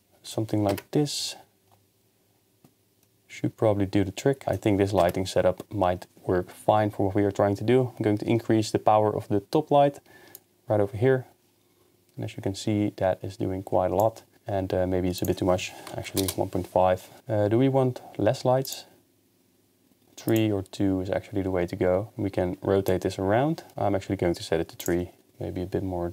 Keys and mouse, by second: 0.7 KP_0, 5.0 KP_0, 10.4-14.0 shift+drag, 15.2-16.2 drag, 18.7 click, 20.3 click, 22.9 click, 25.3-26.1 drag.